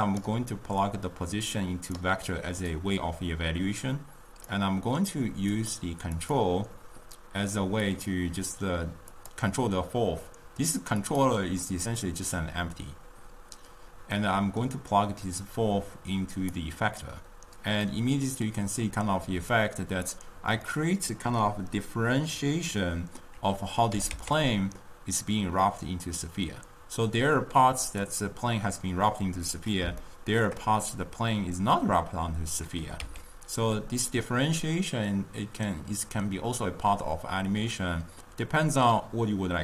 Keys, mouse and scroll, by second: 1.2-5.7 drag, 6.2 click, 8.0 click, 11.1-11.5 drag, 14.3-15.6 middle drag, 15.6 click, 18.1-19.9 middle drag, 19.9 click, 20.7-23.8 middle drag, 24.0 g, 30.4-33.1 shift+middle drag, 33.1 g.